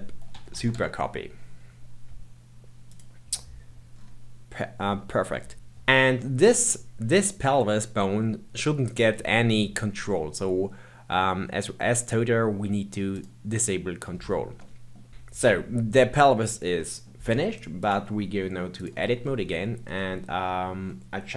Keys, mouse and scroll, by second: 3.9-5.5 scroll down 5, 6.1-11.1 middle drag, 13.1 click, 14.5-17.7 middle drag, 17.7-19.8 drag, 19.8-21.3 middle drag.